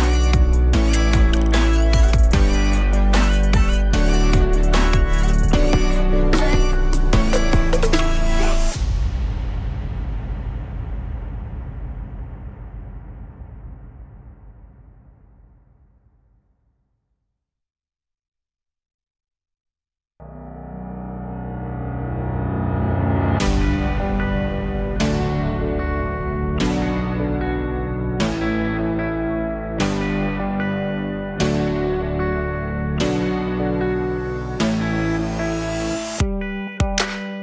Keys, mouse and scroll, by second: 5.1-8.0 alt+right drag, 11.4 click, 11.9-14.4 drag, 14.6-16.4 drag, 16.4-16.9 scroll down 2, 16.9-19.3 alt+middle drag, 19.3-19.7 scroll down 3, 19.7 alt+middle click, 20.2-21.4 scroll up 6, 21.9 scroll down 1, 23.2 z, 24.3 alt+click, 24.9-25.2 scroll down 1, 25.2 alt+middle click, 25.5 Tab, 26.1 click, 28.5-29.5 alt+drag, 33.2 click, 34.5 click, 35.6 Tab, 36.2 click, 36.5 alt+shift+click, 36.6 alt+shift+click.